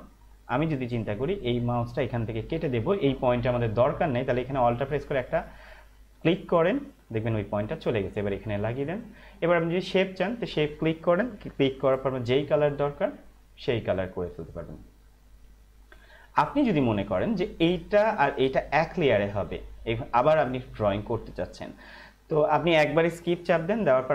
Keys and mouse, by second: 4.6 alt+Num_Lock, 6.8 alt+click, 20.7 click.